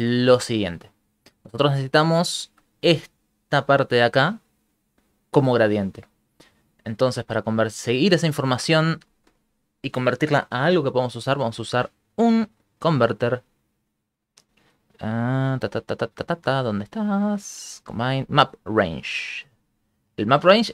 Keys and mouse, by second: 0.2 ctrl+middle click, 6.6 click, 7.2 click, 7.7 click, 11.6 shift+a.